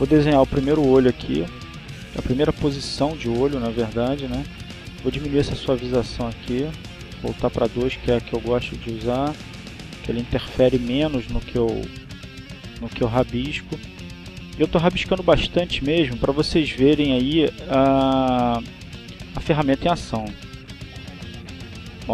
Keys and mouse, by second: 2.2-4.9 drag, 5.9-8.6 drag, 9.3-10.9 drag, 11.1-13.9 drag, 14.3 click, 14.7-17.7 drag, 18.0 click, 19.0-22.0 drag.